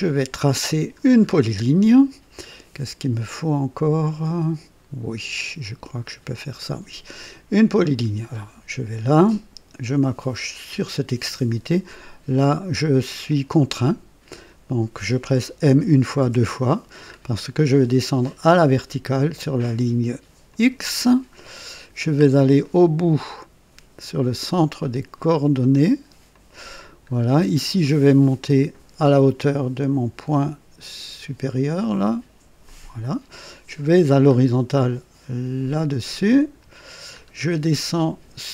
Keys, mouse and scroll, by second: 1.0 scroll down 1, 8.3 click, 10.7 click, 13.2 right click, 15.6 m, 15.9 m, 16.2 m, 17.0-17.4 scroll up 1, 20.4 click, 21.4 right click, 22.2 scroll down 1, 22.6 right click, 26.2 click, 27.1-27.5 scroll down 1, 32.6 click, 34.2-34.5 scroll up 1, 36.3 click, 37.0-37.4 scroll up 2.